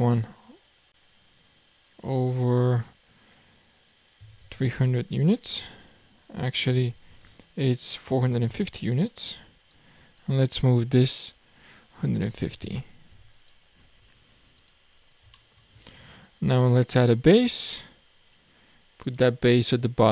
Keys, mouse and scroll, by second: 9.7 click, 11.3 click, 13.8-14.2 scroll up 5, 14.6 click, 15.0-15.4 scroll down 3, 15.4-15.7 shift+middle drag, 15.7 shift+a, 19.0 click, 19.4 click.